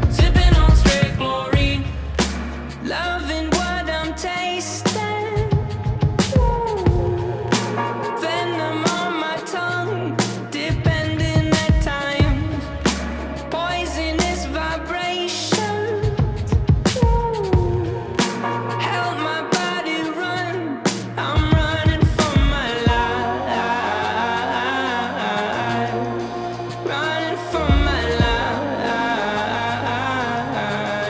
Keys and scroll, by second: 0.2 w, 0.5 e, 1.0 space, 2.7 f, 3.7 w, 6.1 e, 6.9 w, 9.6 e, 11.4 w, 13.8 e, 14.3 w, 16.0 space, 17.2 f, 20.1 e, 21.3 w, 22.9-25.1 typing, 26.5-27.8 typing, 29.1 e.